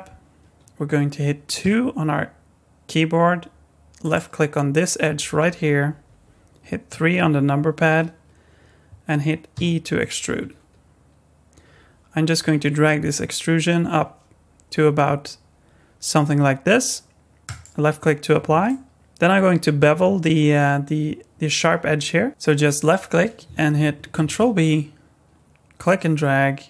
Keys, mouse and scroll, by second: 1.6 2, 4.0 click, 6.9 KP_3, 8.0-9.5 scroll down 1, 9.5 e, 18.6 middle click, 22.8 click, 24.1 ctrl+b.